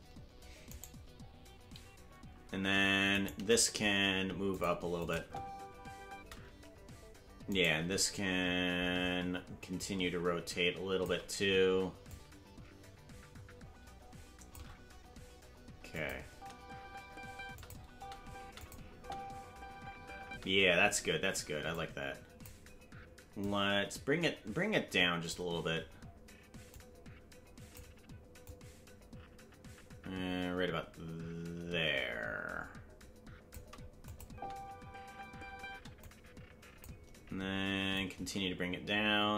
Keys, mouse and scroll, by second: 1.0 right click, 3.3 right click, 3.3 g, 5.0 click, 5.1 space, 7.8 space, 7.8 right click, 9.8-11.1 shift+drag, 12.1-14.6 drag, 15.9 click, 16.2 space, 17.6 click, 17.6 space, 17.9 space, 18.6 click, 18.6 space, 18.9 space, 21.7 click, 21.7 space, 23.4-25.3 drag, 26.7-27.8 drag, 28.4-33.5 drag, 34.1-35.1 drag, 34.2 space, 36.0 click, 36.0 space, 37.9-39.3 drag.